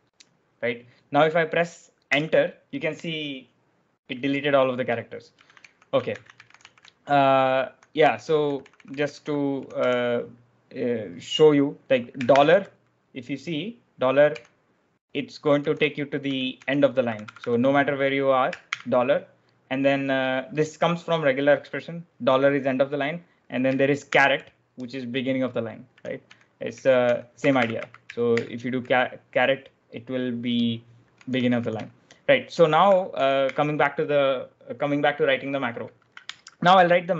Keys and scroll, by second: 2.1 Return, 5.2 ctrl+u, 5.5-10.1 typing, 12.0-12.8 typing, 14.2 k, 15.5-17.3 typing, 18.6 shift+4, 24.0 shift+6, 25.8-28.2 typing, 31.1-33.8 typing, 36.2 0.